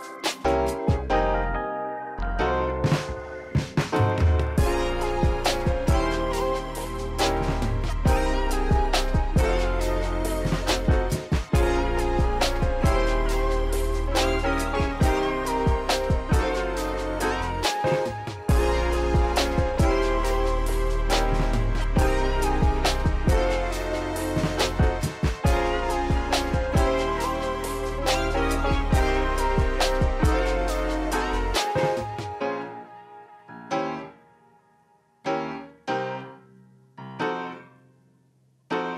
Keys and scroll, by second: 2.1 ctrl+alt+shift+c, 4.5 Return, 5.7 ctrl+alt+shift+c, 11.3 q, 15.9 q, 26.3 ctrl+s, 35.0 ctrl+z, 36.1 ctrl+alt+shift+c.